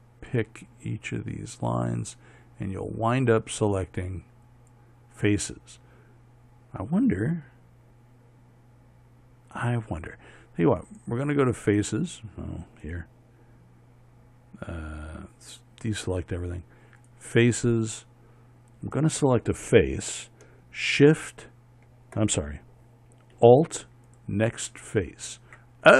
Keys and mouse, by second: 16.4-24.0 drag, 24.6-25.9 drag.